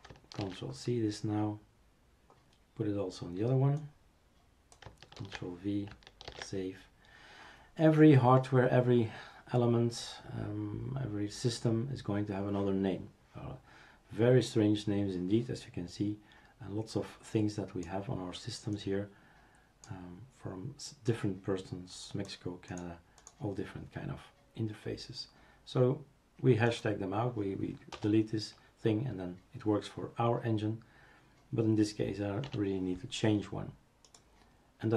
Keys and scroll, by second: 0.4 ctrl+c, 5.2 ctrl+v, 6.3 ctrl+s, 28.0 BackSpace, 32.4 i.